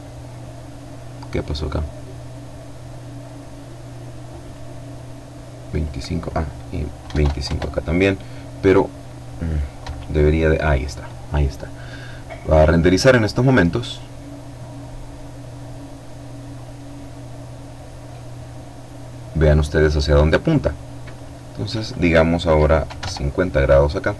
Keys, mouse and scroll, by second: 0.4-4.0 drag, 4.7 click, 6.0 KP_2, 6.1 KP_5, 6.4 KP_Enter, 8.8 F12, 17.1-17.9 scroll up 2, 20.1 click, 21.8 KP_5, 21.9 KP_0, 23.6-24.1 drag.